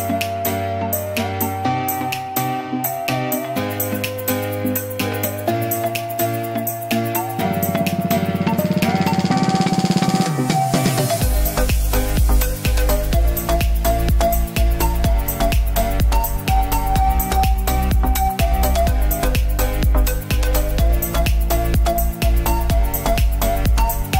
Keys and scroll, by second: 21.3 b.